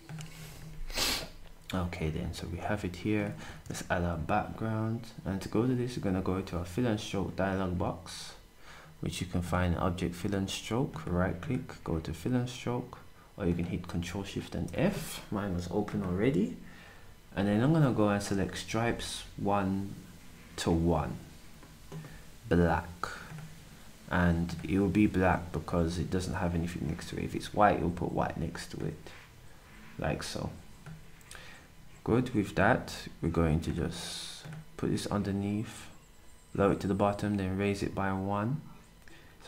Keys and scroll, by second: 3.6 d.